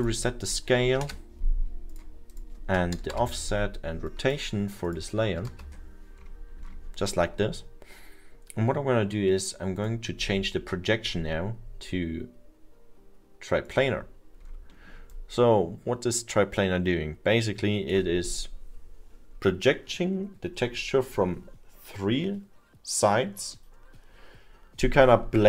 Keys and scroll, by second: 1.1 Return, 5.2 Return, 5.4 0.